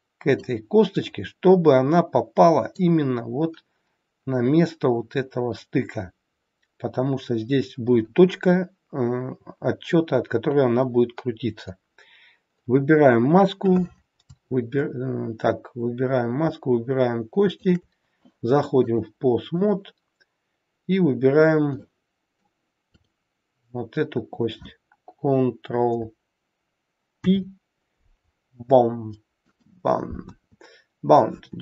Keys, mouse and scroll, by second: 0.8 scroll up 1, 0.9 middle click, 3.3-3.9 scroll down 1.